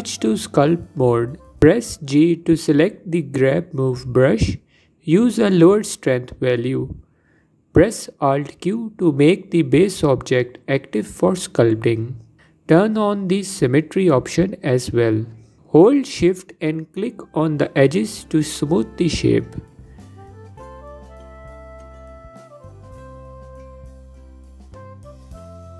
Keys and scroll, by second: 3.0 g, 4.3 f, 8.1 alt+q.